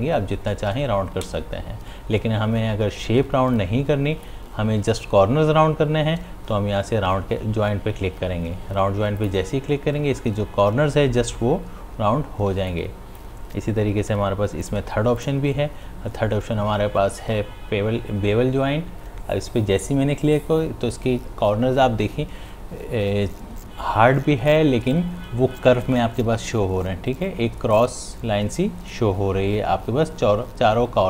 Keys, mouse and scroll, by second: 1.3 ctrl+z, 3.6 click, 4.7 ctrl+z, 9.2 click, 12.5 space, 12.7 click, 13.0 space, 14.7 click.